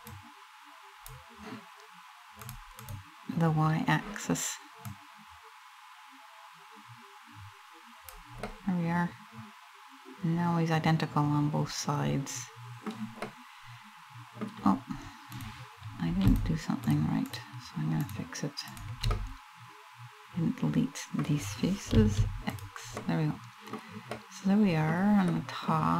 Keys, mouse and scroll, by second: 2.1 click, 2.5 click, 4.5 click, 8.1 middle click, 12.9 middle click, 15.0 right click, 15.9 shift+right click, 16.5 shift+right click, 16.9 shift+right click, 17.6 shift+right click, 18.3 shift+right click, 18.7 middle click, 21.6 x, 22.6 middle click, 23.8 middle click, 24.5 middle click, 25.0 middle click, 25.8 middle click.